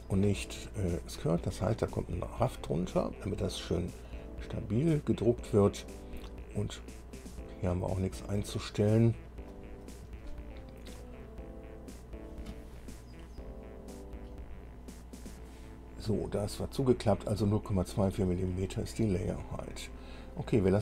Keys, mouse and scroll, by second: 4.2-9.8 drag, 14.5 click.